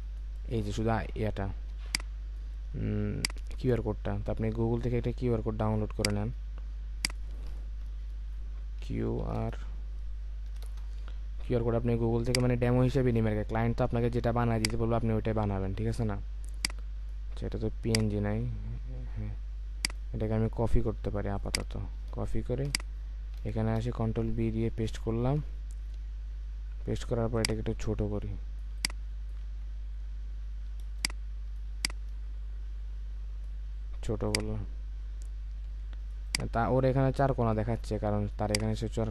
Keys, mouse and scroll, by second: 0.8-1.7 alt+scroll up 2, 1.7 space, 3.2 space, 8.8-9.2 typing, 10.6 Return, 19.1-19.8 scroll down 1, 19.8 right click, 23.8 ctrl+v, 24.1 Return, 25.4-25.9 alt+scroll down 1, 29.5-29.9 alt+scroll up 1, 30.9 space.